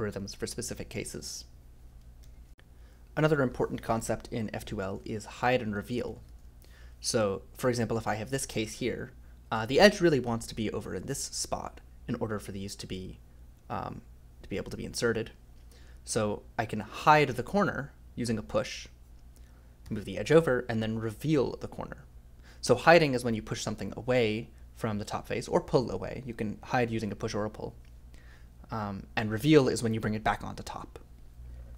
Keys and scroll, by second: 2.2 o, 5.4-6.8 typing, 17.0 i, 19.8 j, 21.1 k.